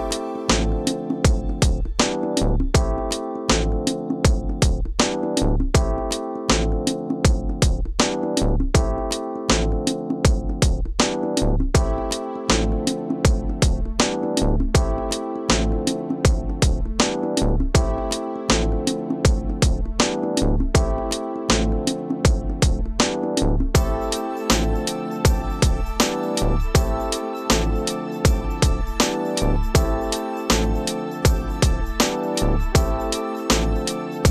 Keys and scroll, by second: 0.4 f, 3.8 f, 7.4 ctrl+t, 12.4 Return, 12.8 ctrl+space, 15.7 space, 20.9 space, 26.3 2, 29.0 [.